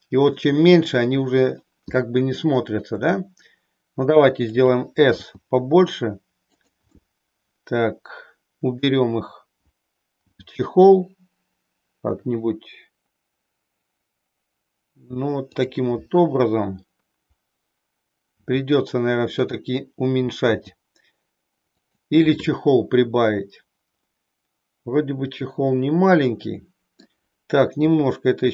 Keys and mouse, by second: 2.9 s, 4.5 click, 5.3 g, 6.7 click, 6.9-8.9 middle drag, 10.2 g, 18.3 s, 20.5 g, 21.8 click, 22.4-27.0 middle drag, 27.9 r.